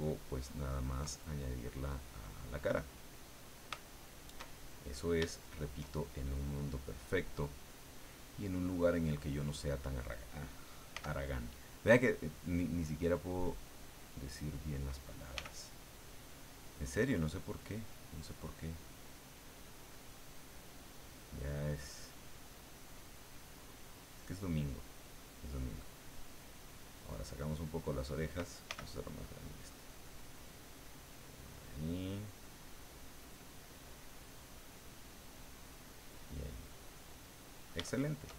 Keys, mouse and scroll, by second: 1.2-3.2 ctrl+middle drag, 3.2 scroll up 1, 3.4-4.8 shift+middle drag, 4.8 click, 5.4 shift+click, 6.0 shift+click, 6.3 middle click, 8.1 click, 9.0 click, 10.9 f, 11.5 click, 13.1-14.1 drag, 14.2 click, 15.4 f, 15.9 click, 16.5-17.5 drag, 17.6 click, 18.2 click, 18.9 click, 19.5 click, 20.9 click, 22.5 click, 23.2-24.2 drag, 24.8 click, 26.2 click, 27.5 click, 28.7 f, 29.1 click, 29.7-31.2 drag, 31.4 click, 32.7 click, 33.3 click, 33.8 click, 34.2 click, 34.5 click, 35.4 click, 35.9-37.7 middle drag, 37.9 shift+middle click.